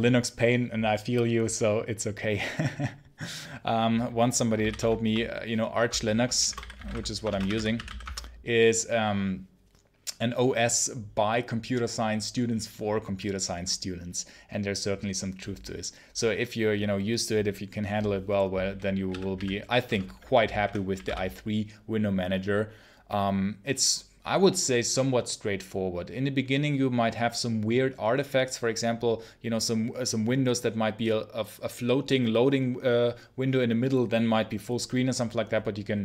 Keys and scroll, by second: 4.5 ctrl+c, 4.7 ctrl+l, 6.0-8.2 typing, 19.0-21.4 typing.